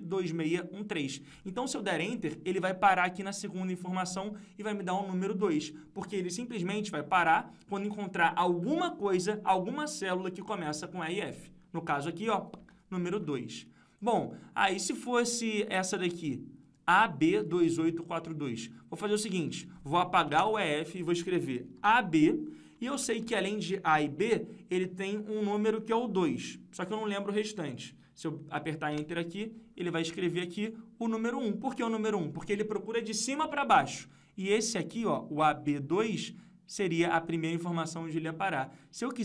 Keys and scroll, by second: 33.3 F2.